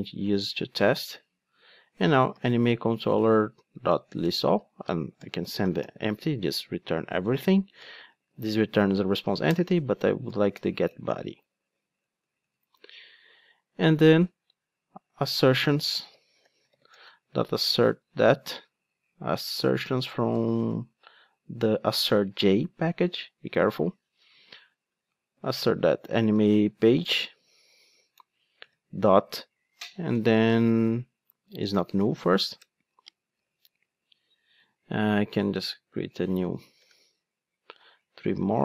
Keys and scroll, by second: 3.0 Return, 9.5 Return, 10.5 alt+Return, 12.5 Return, 22.0 Return, 27.6 Return, 32.6 Return, 35.7 Return, 35.8 super+d.